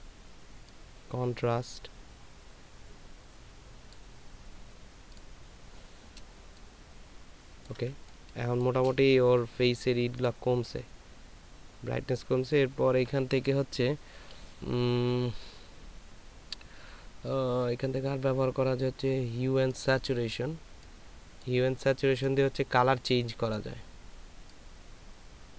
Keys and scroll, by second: 6.8 ctrl+space, 7.9 ctrl+space.